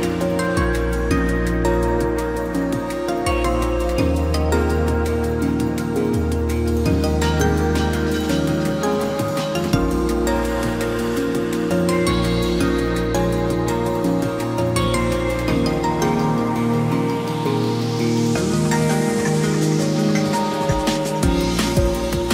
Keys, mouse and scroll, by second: 2.6 ctrl+j.